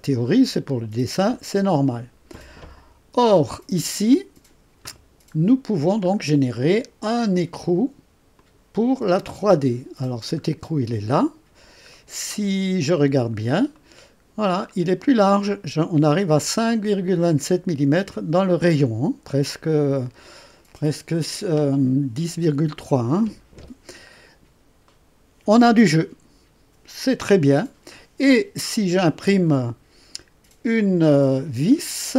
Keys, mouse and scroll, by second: 0.3-0.7 scroll down 2, 3.1 space, 5.3 scroll up 2, 6.1 scroll up 2, 8.3 click, 9.0 space, 10.3 scroll up 2, 11.9 right click, 13.0 scroll up 1, 13.7 right click, 14.6-15.0 scroll down 1, 24.8 right click.